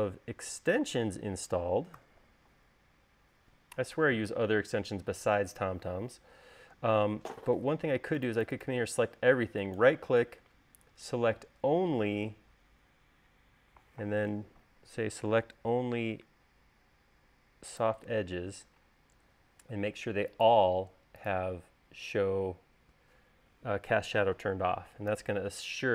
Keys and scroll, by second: 2.6 u, 25.8 u.